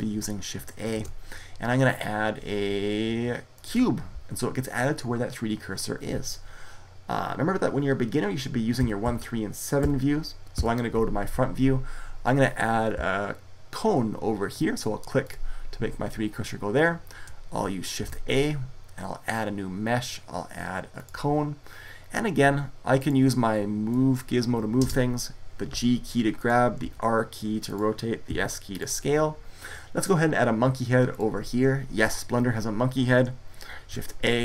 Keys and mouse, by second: 0.7 shift+a, 8.6 KP_1, 8.8 KP_3, 9.6 KP_7, 10.3 KP_1, 15.0 click, 17.8 shift+a, 22.7-25.5 drag, 25.5 g, 26.6 r, 27.5 click, 28.1 s, 33.5 shift+a.